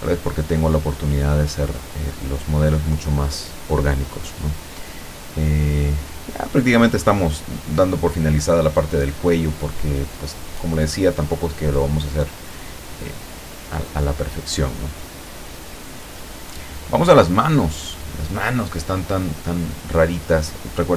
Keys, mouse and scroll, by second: 0.0 click, 0.9 click, 1.5 click, 2.1 click, 2.7 click, 3.2 click, 3.8 click, 4.5 click, 5.3 click, 5.9 click, 6.8 middle click, 7.0 scroll up 2, 7.6 scroll down 2, 8.3 middle click, 9.7-11.6 drag, 11.7-12.1 scroll up 2, 12.6 shift+click, 13.5 shift+scroll up 2, 14.0 shift+middle click, 14.7 shift+scroll up 2, 16.3 click, 17.9 click, 18.6-19.0 scroll up 2, 19.0 scroll down 2, 19.7-20.9 middle drag.